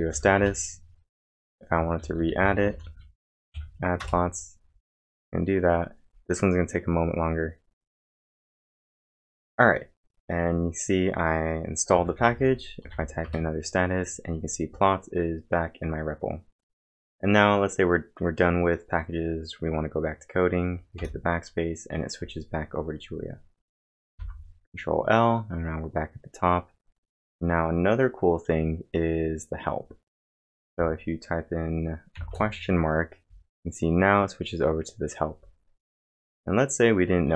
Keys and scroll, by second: 0.0-0.6 typing, 2.4-3.8 typing, 4.0 Return, 11.7-13.4 typing, 24.1 ctrl+l, 24.1 Return, 32.1 shift+/, 34.5-35.2 typing.